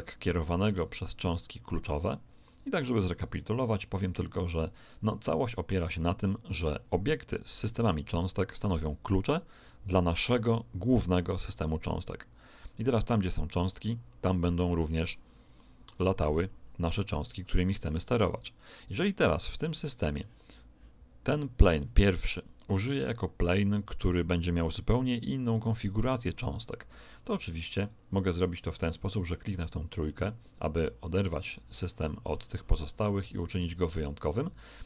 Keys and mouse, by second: 7.9 right click, 27.4-30.3 middle drag, 29.9 click.